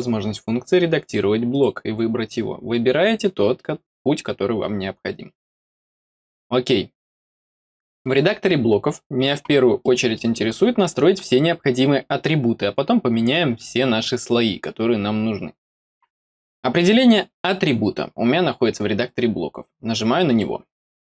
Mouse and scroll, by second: 1.4 click, 6.0 click, 7.7 middle click, 8.1-9.7 scroll down 1, 9.7 middle click, 20.2 click.